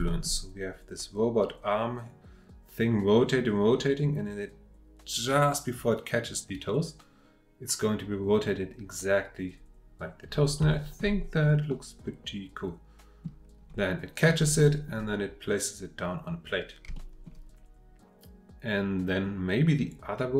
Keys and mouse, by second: 0.1 shift+middle click, 10.7 shift+middle drag, 11.7-13.2 middle drag, 14.6-14.9 middle drag, 16.9-17.3 shift+middle drag.